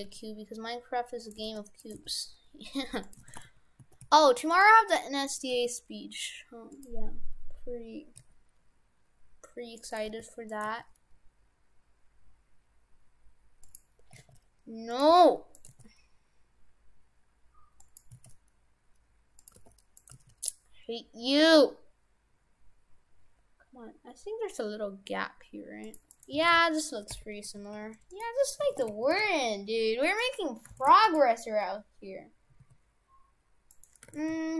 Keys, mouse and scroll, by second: 0.0 s, 1.4 g, 1.9 g, 3.3 shift+f, 4.7 g, 5.5 g, 8.2 s, 10.1 g, 10.7 g, 14.2 s, 15.1 g, 15.7 g, 18.1 s, 19.5 g, 20.1 g, 26.1 right click, 26.4 shift+f, 28.5 right click, 28.7 shift+f, 30.7 shift+f, 32.5 s, 34.1 shift+f.